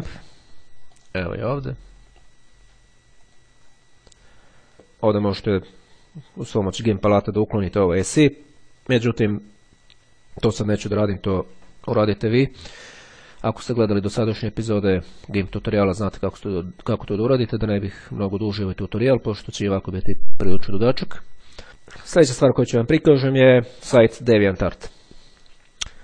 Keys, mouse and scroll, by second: 1.1 click, 3.0-4.0 drag.